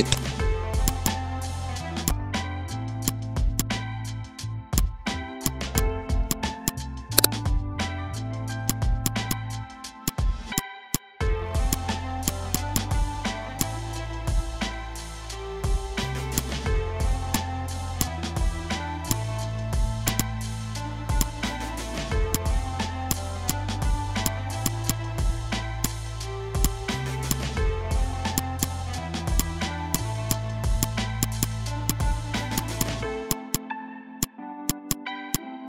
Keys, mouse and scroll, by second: 14.0-15.2 typing, 16.3-20.0 drag, 20.5 typing, 21.2-24.2 drag, 24.4 z, 24.6 click, 24.7 space, 24.8 click, 25.2 v, 25.8 shift+click, 26.4 Pause, 26.6-32.4 drag, 32.4 ctrl+z, 32.5-35.6 drag.